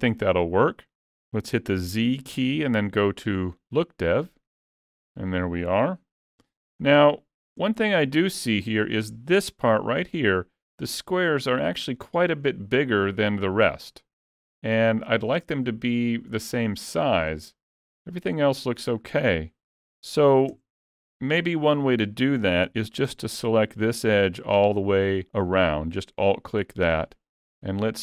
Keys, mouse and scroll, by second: 0.5 middle click, 1.9 z, 4.9 alt+a, 5.3 middle click, 6.4 Tab, 6.9 middle click, 7.8 shift+middle click, 8.3 scroll up 1, 11.4 middle click, 17.1 middle click, 19.3 middle click, 19.6-20.5 scroll up 1, 20.5 Tab, 21.3 middle click, 21.8 scroll up 2, 22.7 2, 24.4 alt+click, 27.4 ctrl+e.